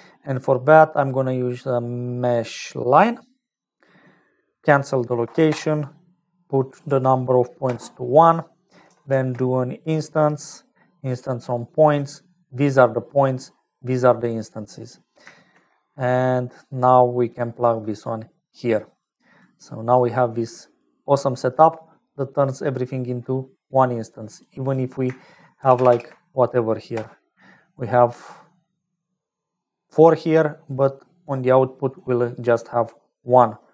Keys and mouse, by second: 4.6-6.2 drag, 6.8-8.4 drag, 9.0 shift+a, 12.6 click, 13.8-15.1 drag, 15.9 middle click, 17.4 click, 18.5 click, 19.3 click, 20.3 click, 24.4-27.5 drag, 25.7 shift+i, 25.8 shift+i, 32.7-33.7 drag.